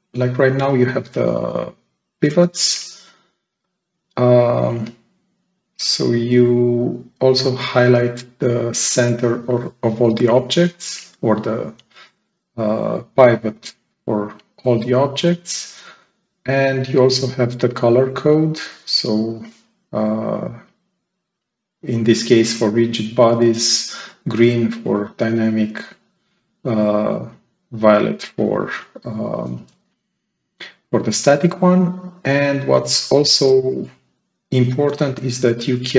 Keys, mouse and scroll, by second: 0.9 click, 3.4-4.3 right drag, 3.5-4.3 drag, 4.6-5.0 scroll down 2.